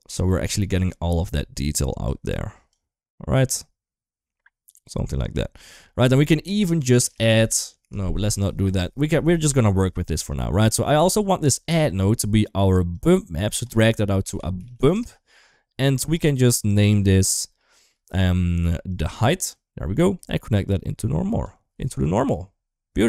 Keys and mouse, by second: 0.4 middle click, 1.8 drag, 2.5-4.5 drag, 5.8 middle click, 6.8 shift+a, 8.2 middle click, 10.4 middle click, 10.9 middle click, 11.7 middle click, 12.7-15.7 drag, 16.4 click, 16.8 shift+middle click, 17.6 shift+middle click, 18.7-19.3 drag, 19.8 middle click, 20.4-21.2 drag.